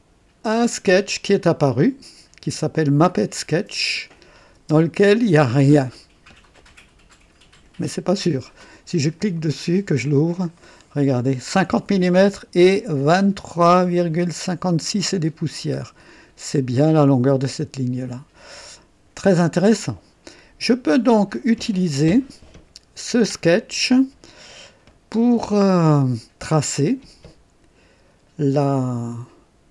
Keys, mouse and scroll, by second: 3.8 click, 4.5 space, 9.2 click, 10.5-11.4 right drag, 13.0 scroll up 1, 15.9-16.2 scroll down 2, 25.3 &.